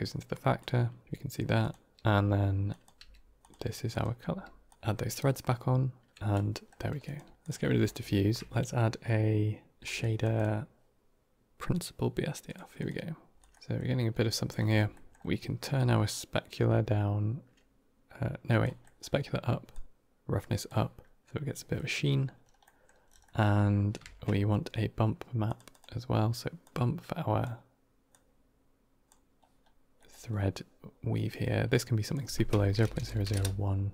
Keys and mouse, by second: 0.5 click, 1.0 g, 2.6 drag, 2.9 g, 3.9 click, 4.2 g, 7.1 g, 7.3 click, 7.6 x, 7.9 middle click, 8.1 shift+a, 9.9-12.7 drag, 13.3 click, 13.5 middle click, 13.5 g, 14.8 middle click, 15.1 g, 15.9-18.5 drag, 18.7 middle click, 19.6 click, 21.2 middle click, 21.6 middle click, 22.5 middle click, 23.1 middle click, 23.9 shift+a, 26.5-27.3 drag, 28.0-29.0 drag, 29.9 middle drag, 31.2 middle click, 31.9-33.7 drag, 32.7 KP_0.